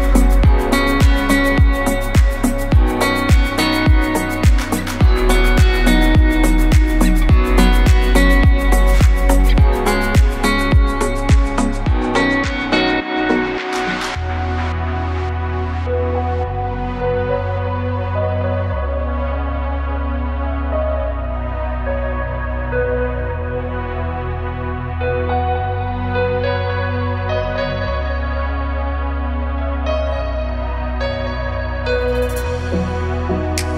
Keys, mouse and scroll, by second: 1.3 click, 2.4 click, 3.3 click, 4.1 click, 4.9 KP_1, 17.0 click, 18.2 shift+click, 18.9 shift+click, 19.4 shift+click, 20.3 shift+click, 21.1 click, 22.5 click, 23.0 shift+click, 23.6 shift+click, 24.2 click, 25.6 shift+click, 26.3 shift+click, 26.9 click, 27.7 KP_1, 29.0 i, 32.0 shift+click, 32.6 shift+click, 33.2 shift+click.